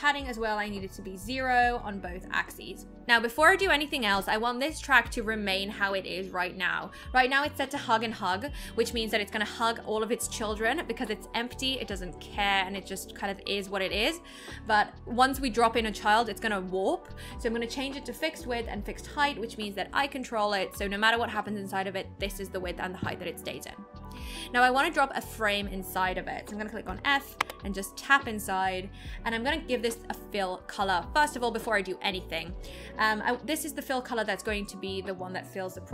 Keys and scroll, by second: 27.4 f.